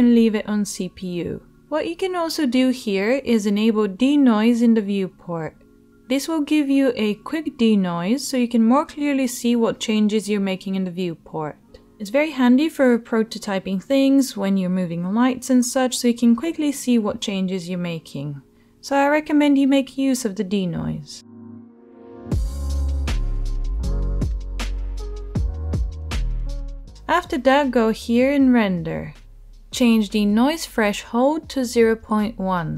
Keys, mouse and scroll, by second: 4.1 click, 10.8-12.5 drag, 12.7 h, 16.6 ctrl+z, 22.2 h, 24.0 ctrl+z, 26.8 h, 27.3 right click.